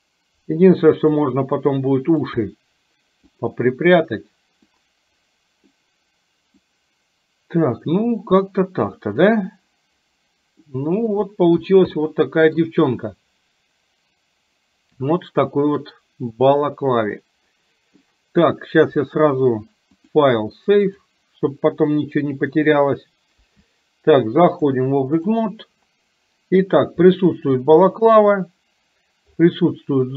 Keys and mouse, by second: 1.7 click, 2.4 middle click, 4.7-5.8 drag, 6.7-9.3 drag, 10.8 middle click, 12.1 middle click, 15.6-17.6 middle drag, 17.7 middle click, 19.9-22.6 drag, 23.6 KP_1, 24.6-25.6 drag.